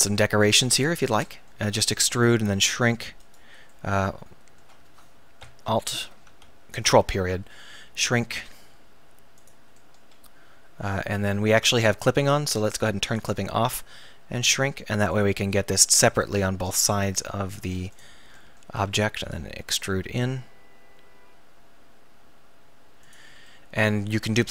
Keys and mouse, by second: 1.3 middle click, 2.0 e, 2.4 s, 5.4 alt+., 6.5 ctrl+., 8.0 s, 9.9-11.2 drag, 12.1 ctrl+z, 13.9 s, 18.0-20.1 drag, 18.9 e, 23.2-24.5 drag.